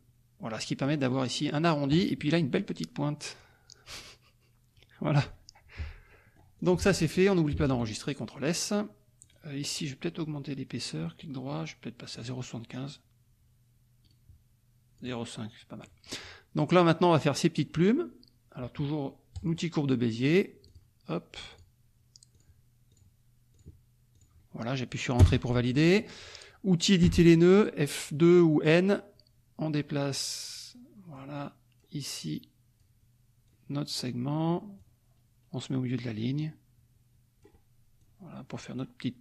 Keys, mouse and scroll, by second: 3.3-5.4 drag, 5.7 F1, 6.1 click, 7.6 ctrl+s, 8.0 ctrl+click, 11.0 right click, 12.1 click, 14.0 right click, 15.0 click, 15.9 middle click, 19.3 click, 20.7 click, 21.5 click, 22.3 click, 22.9 click, 23.5 click, 24.1 click, 25.2 Return, 27.0 F2, 28.8-29.9 drag, 30.1 click, 31.1 click, 32.3 click, 33.4 click, 34.7-36.1 drag, 36.3-37.6 drag, 37.9-39.0 drag.